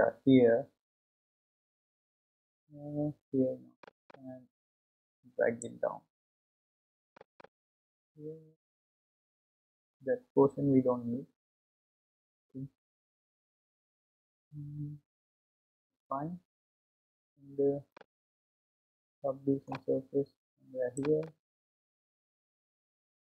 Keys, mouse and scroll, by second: 4.1-6.9 drag, 7.4-10.3 drag, 12.1 ctrl+z, 14.1 scroll up 2, 15.1-15.9 scroll up 1, 15.9-16.6 scroll down 2, 16.6-17.7 scroll down 1, 17.9 scroll down 1, 17.9-21.2 middle drag, 21.2-23.3 drag.